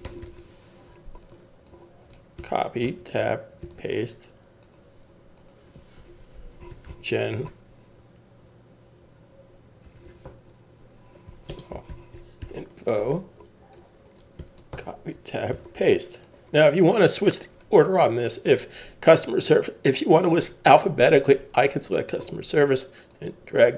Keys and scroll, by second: 0.0-0.7 typing, 2.4 super+c, 2.8 Tab, 3.6 super+v, 6.4-12.6 typing, 14.4 super+c, 14.7 Tab, 15.5 super+v.